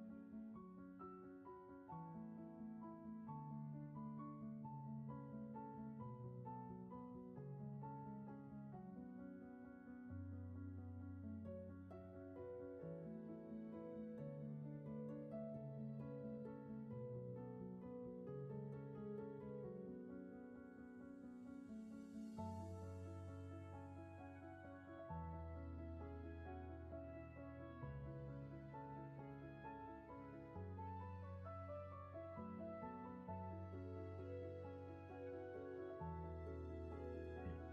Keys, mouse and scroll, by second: 3.2 ctrl+z, 10.5 ctrl+z, 19.0 ctrl+z, 32.0 ctrl+z, 32.5 space, 34.0 ctrl+z, 35.3 space, 37.0 shift+space.